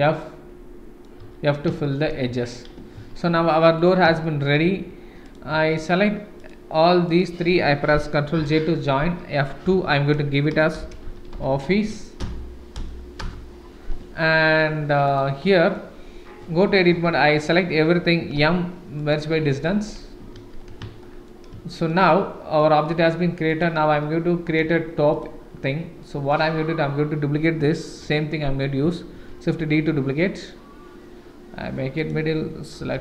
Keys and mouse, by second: 0.1 middle click, 1.2 f, 1.8 shift+middle click, 2.2 Tab, 2.9 ctrl+s, 3.7 click, 4.2 shift+middle drag, 6.4 shift+middle click, 7.0 shift+middle click, 8.4 ctrl+j, 9.7 F2, 11.2 f, 15.0 click, 15.4 middle drag, 16.4 Tab, 16.9 a, 18.3 m, 19.9 Tab, 20.4 ctrl+s, 21.0 shift+middle drag, 21.7 shift+middle drag, 22.1-22.6 middle drag, 22.8 middle drag, 23.5-25.4 drag, 26.0-26.3 middle drag, 28.0 KP_7, 29.1 shift+d, 32.8 KP_Decimal.